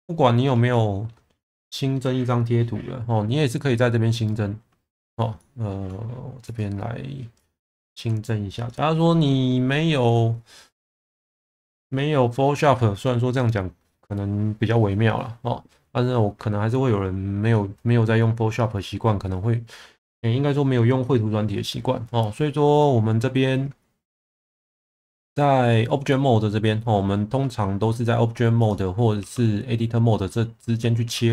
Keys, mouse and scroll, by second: 7.5-28.7 drag, 29.2 Tab, 30.6 Tab, 31.0 Tab.